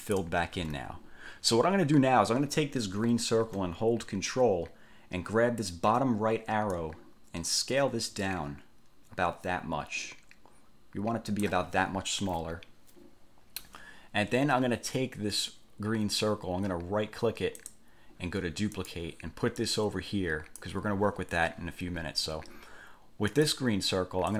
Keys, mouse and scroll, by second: 0.8 ctrl+z, 6.9-11.8 ctrl+drag, 17.8 click, 18.9 click, 19.8 click, 23.5 click.